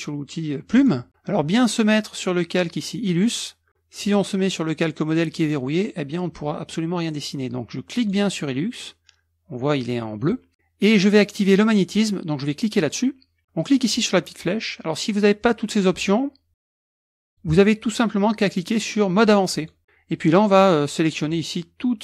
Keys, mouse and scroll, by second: 0.7 click, 4.0 click, 8.0 click, 12.7 click, 13.8 click, 17.2 click, 19.6 click, 21.2 click.